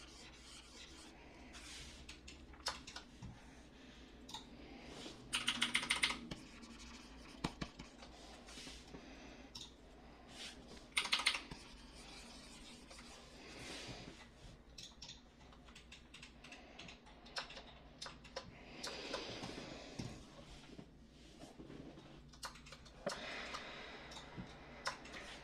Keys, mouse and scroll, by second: 5.3-6.0 typing, 10.9 ], 11.1 ], 11.2 ].